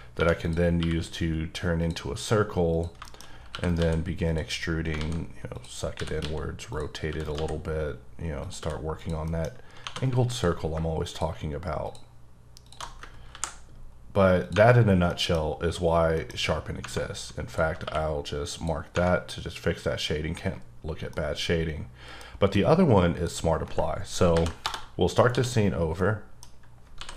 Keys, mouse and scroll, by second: 0.2 1, 0.4 click, 0.8 q, 1.8 click, 2.7 click, 3.1-3.5 shift+scroll up 3, 3.5 e, 3.6 right click, 3.7 s, 4.2 click, 5.0-7.3 typing, 5.5 click, 6.7 click, 7.2 right click, 8.4 click, 8.6 e, 8.9 click, 9.2 middle click, 9.4-9.8 scroll up 3, 9.8 2, 10.3 alt+click, 11.1 alt+click, 11.8 alt+shift+click, 12.8 alt+shift+double click, 13.3 ctrl+b, 13.9-14.4 scroll up 2, 14.4 click, 14.7 scroll down 3, 15.1 middle click, 16.1 middle click, 16.3-16.8 scroll up 5, 17.5 alt+click, 17.8 q, 18.5 click, 19.1-20.3 scroll down 2, 20.3-21.1 scroll down 3, 21.1 middle click, 22.2 scroll down 2, 22.5 middle click, 24.3 n, 25.3 d, 26.0 middle click, 26.5 scroll down 1, 27.0 s.